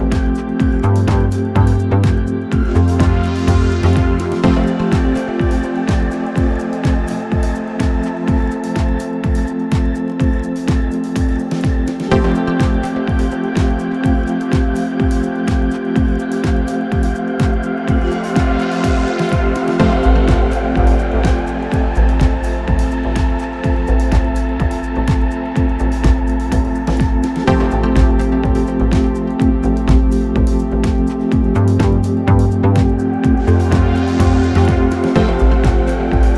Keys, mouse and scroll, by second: 1.3 click, 2.1-3.8 drag, 4.4-5.4 scroll down 8, 5.4 scroll up 1, 5.6-6.3 scroll down 1, 6.3 scroll down 2, 6.5 click, 7.5-9.2 right drag, 9.2-9.8 scroll up 1, 9.8-10.7 scroll up 4, 10.7-13.7 drag, 13.7-14.6 scroll up 2, 14.6-15.7 drag, 15.7-16.3 scroll up 4, 16.3-18.6 drag, 18.6 ctrl+right click, 20.0 click, 22.8 ctrl+z, 25.2 ctrl+click, 26.0 click, 26.9 click, 27.8 click, 28.3-29.0 scroll up 3, 29.1-29.8 scroll down 1, 29.8 ctrl+right click, 31.5 ctrl+right click, 32.4 ctrl+right click, 33.7 ctrl+right click, 34.7 ctrl+right click, 35.6 ctrl+right click.